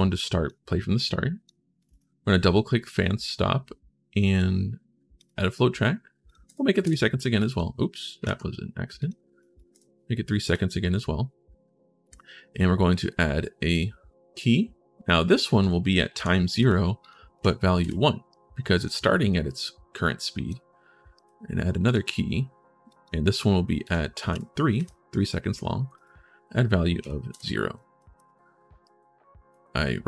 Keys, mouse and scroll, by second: 0.8 click, 1.6 click, 4.9 click, 6.0 click, 6.2 3, 7.1 click, 8.0 ctrl+z, 8.7 click, 9.1 click, 12.8 right click, 13.5 click, 15.1 click, 16.8 click, 17.1 1, 18.1 right click, 18.9 scroll down 1, 19.2-20.3 right drag, 20.9 right click, 21.6 click, 22.7 click, 23.6 click, 24.1 3, 25.7 click, 27.5 right click, 28.3 scroll down 1, 28.6 right click, 29.8 right click.